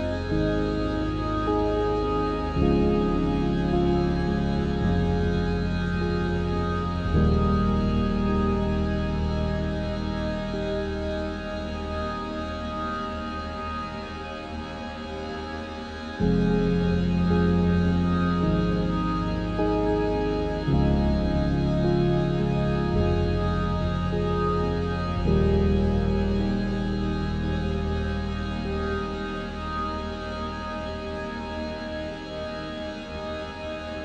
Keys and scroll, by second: 31.8 z, 32.8 Tab.